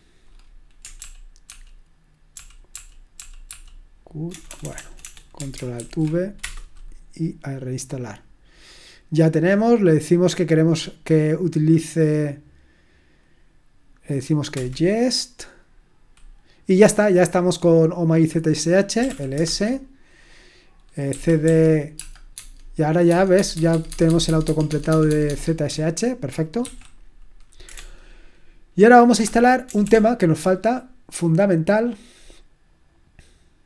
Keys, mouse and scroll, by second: 1.0 ctrl+p, 1.5 ctrl+p, 2.3 ctrl+p, 2.7 ctrl+p, 3.2 ctrl+p, 4.3 ctrl+BackSpace, 4.8 BackSpace, 5.0 BackSpace, 5.8 ctrl+alt+v, 18.7-19.5 typing, 21.1-21.9 typing, 22.3 Tab, 23.0 Tab, 23.3 Tab, 23.5 Tab, 23.7 Tab, 23.8 Tab, 24.0 Tab, 24.2 Tab, 24.4 Tab, 24.4-25.1 typing, 24.6 Tab, 24.9 Tab, 25.1 Tab, 25.2 Tab, 26.6 ctrl+c, 26.6 typing, 27.7-29.8 typing.